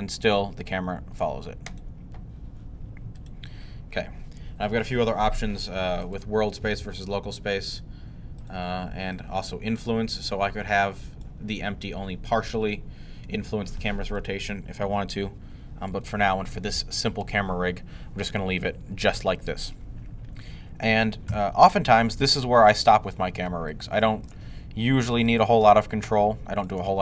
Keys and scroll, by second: 21.1 5.